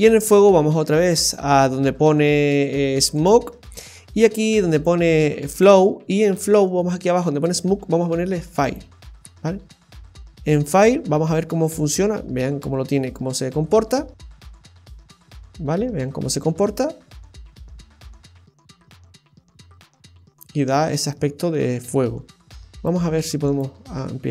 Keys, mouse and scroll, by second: 3.1 click, 3.8 scroll down 2, 4.7 click, 5.9-7.0 scroll down 7, 7.4 click, 9.5-10.0 scroll down 1, 10.3-10.9 scroll down 1, 10.9 space, 12.5-12.9 scroll up 1, 12.9 middle click, 13.8-14.2 scroll up 1, 16.3 space, 20.7 space, 22.9 click, 23.9 space.